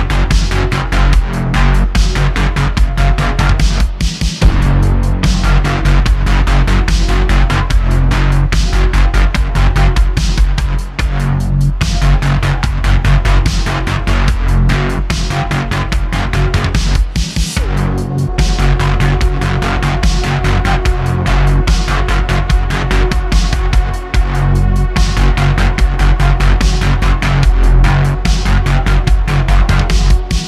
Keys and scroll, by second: 4.8 shift+Caps_Lock, 6.4 shift+Caps_Lock, 8.0 r, 8.7 s, 10.6 super+Caps_Lock, 10.6-12.7 typing, 14.5 b, 18.5 Tab, 19.0 shift+Caps_Lock, 21.8 alt+Caps_Lock, 24.9 s, 28.8 Tab, 30.0 shift+Caps_Lock.